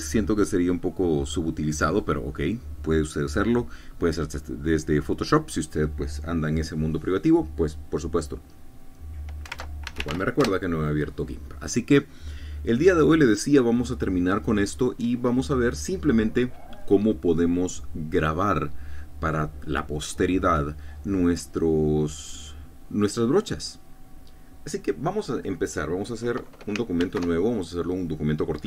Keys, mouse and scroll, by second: 10.4 alt+F2, 10.8 alt+g, 10.9 alt+i, 11.0 alt+m, 11.4 alt+Return, 27.9 ctrl+n.